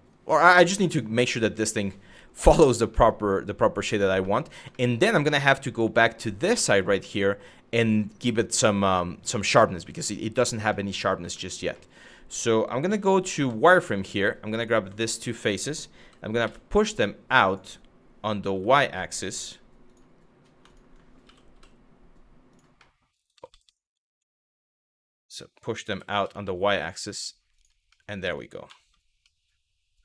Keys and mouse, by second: 0.1 shift+middle click, 1.4 middle click, 2.5 shift+middle click, 3.8 shift+middle click, 4.4 shift+middle click, 5.0 middle click, 6.8 middle click, 10.4 middle click, 11.0 shift+middle click, 11.4 middle click, 12.5 z, 13.4 middle click, 14.8 click, 16.1 x, 20.9 g, 21.2 y, 22.1 click, 22.5 middle click, 23.0 ctrl+z, 23.1 ctrl+z, 24.2 middle click, 24.7 click, 24.9 shift+click, 25.5 g, 25.8 y, 27.2 click, 27.6 middle click, 29.0-30.0 middle drag.